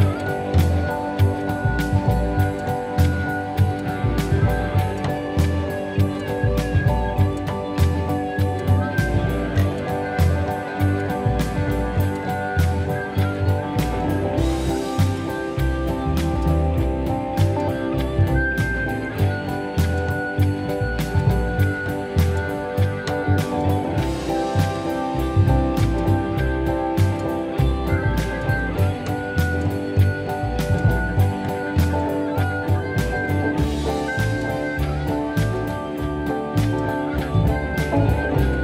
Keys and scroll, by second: 17.0 F1, 19.5 p, 23.3 ctrl+d, 24.2 F1, 34.1 F1, 35.7 F1, 36.2 ctrl+d.